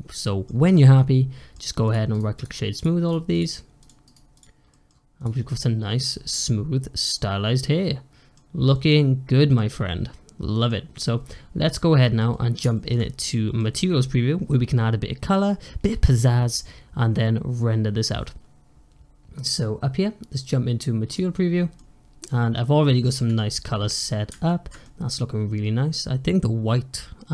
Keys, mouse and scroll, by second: 0.6 scroll up 2, 0.8-1.7 middle drag, 1.7 click, 2.0-2.6 right drag, 2.6 click, 3.0 right click, 3.7 click, 3.9-4.6 right drag, 4.6 middle drag, 4.8 scroll down 1, 5.0 click, 5.3-10.8 middle drag, 10.8 click, 11.6-13.0 middle drag, 13.0 scroll up 1, 13.2-16.4 middle drag, 21.0 click, 21.7-23.9 middle drag, 23.9-24.3 scroll up 1, 24.3-27.3 shift+middle drag.